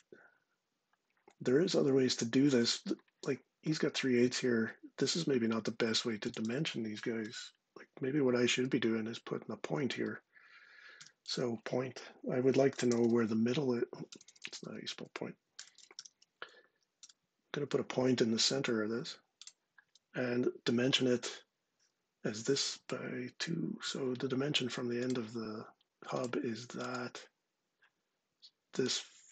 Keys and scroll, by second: 6.9 Delete, 10.6 s, 11.9-16.3 typing, 16.7 Return, 23.5 d.